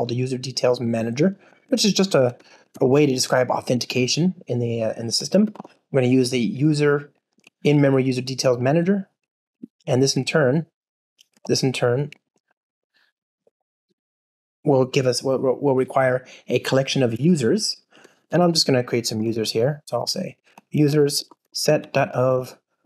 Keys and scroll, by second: 2.1 Return, 3.8 Return, 9.4 alt+shift+Left, 10.3 super+p, 13.9 Escape, 17.0 super+p.